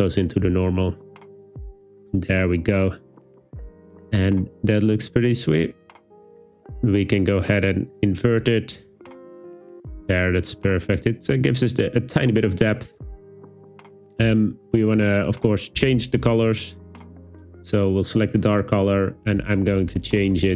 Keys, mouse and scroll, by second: 7.9 click, 17.2 click, 18.3 click.